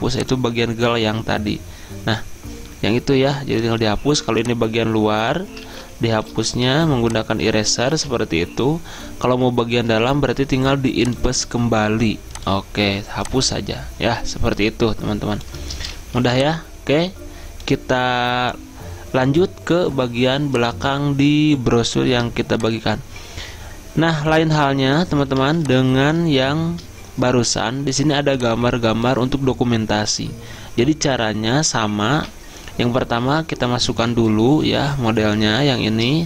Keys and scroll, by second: 5.7 ctrl+z, 6.7 e, 8.0 ctrl+z, 15.9 ctrl+d, 16.3 z.